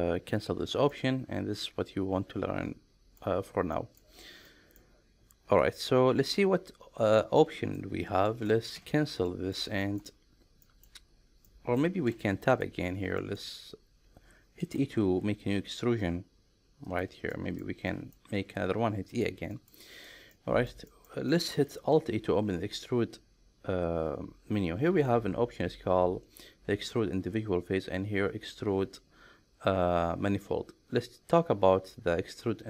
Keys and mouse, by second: 0.9-3.2 middle drag, 3.7 middle click, 4.5 middle click, 7.4 middle click, 8.3 middle click, 8.7 Tab, 9.3-9.6 middle drag, 9.8 shift+middle drag, 10.6 shift+middle drag, 11.5 middle drag, 12.0 Tab, 12.5 click, 13.2 middle click, 14.6 e, 16.8 click, 17.3 shift+middle click, 17.9 middle click, 18.3 e, 19.1 click, 19.5 middle click, 19.9 click, 20.3 middle click, 20.9 shift+middle click, 21.3 middle click, 21.9 alt+e.